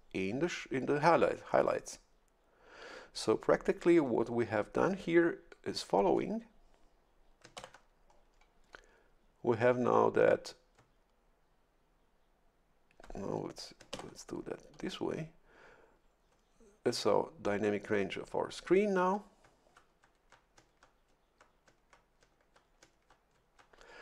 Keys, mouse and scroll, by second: 7.5 shift+F11, 13.9 shift+F11.